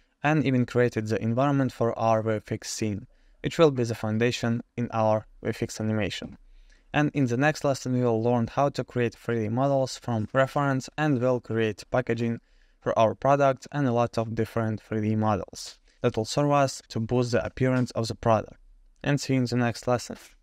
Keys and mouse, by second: 0.8 Tab, 2.0 click, 2.0 Tab, 3.0 Tab, 3.1 click, 3.6 shift+middle drag, 3.9 shift+middle click, 4.2 click, 4.4 Tab, 5.1 Tab, 5.3 KP_0, 5.5 middle drag, 5.6 middle click, 6.2 Tab, 6.3 middle drag, 6.5 3, 6.7-7.5 drag, 8.2 click, 9.2-10.9 drag, 13.3 click, 13.6 ctrl+p, 15.4 g, 18.0 click, 18.4 g.